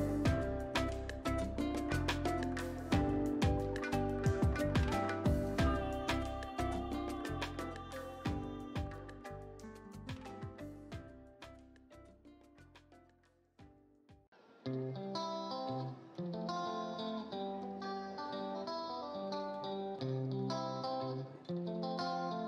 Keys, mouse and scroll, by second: 0.0 ctrl+click, 1.0 ctrl+alt+shift+e, 3.8 ctrl+alt+shift+e, 3.9 alt+click, 11.6 click, 15.7-19.3 scroll down 1, 22.1-22.4 scroll down 1.